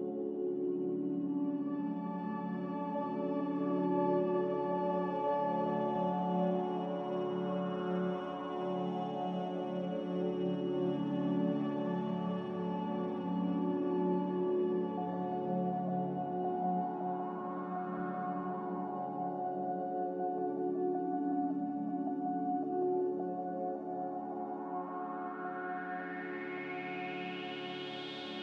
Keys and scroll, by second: 0.2-1.0 typing, 2.6 typing, 6.0-7.1 typing, 8.4-9.2 typing, 11.3 ctrl+g, 20.5 n.